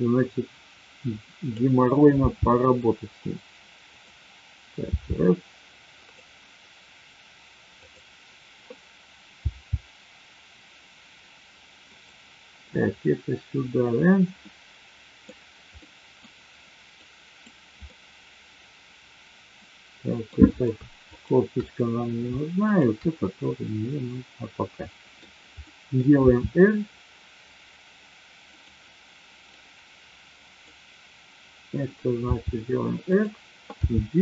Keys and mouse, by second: 2.1 g, 3.9 click, 4.9 r, 7.8 click, 9.4 g, 11.9 click, 14.4 middle click, 15.8-16.1 middle drag, 16.9-17.5 drag, 17.8-20.1 middle drag, 21.0-22.0 shift+drag, 23.8-25.0 middle drag, 25.7 middle click, 26.1 r, 29.5-30.8 drag, 32.3 r, 33.8 g.